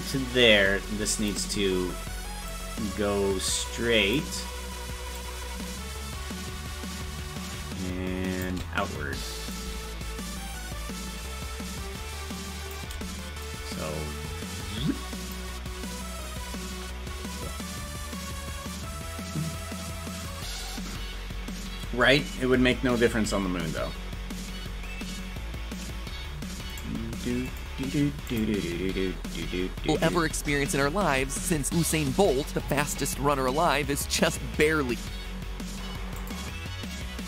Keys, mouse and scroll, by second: 2.5-4.1 drag, 5.1-8.4 drag, 9.5-15.3 drag.